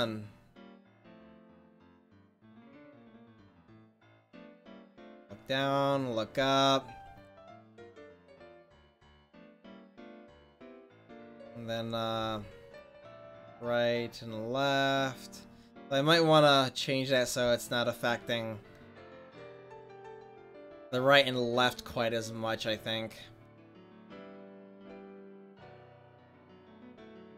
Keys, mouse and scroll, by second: 7.3 middle click, 12.2 r, 27.2-27.3 drag.